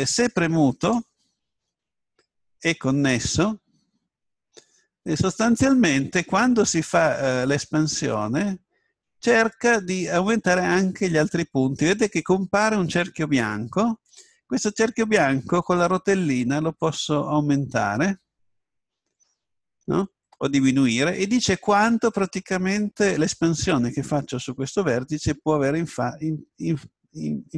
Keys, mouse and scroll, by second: 1.4-2.7 drag, 6.7 s.